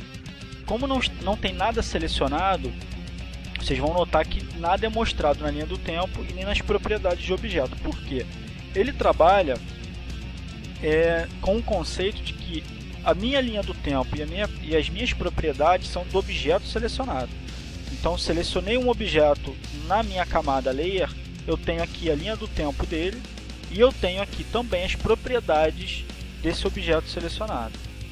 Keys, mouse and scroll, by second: 1.7 click, 4.9 click, 6.6 click, 13.4 click, 20.6 click, 22.3 click.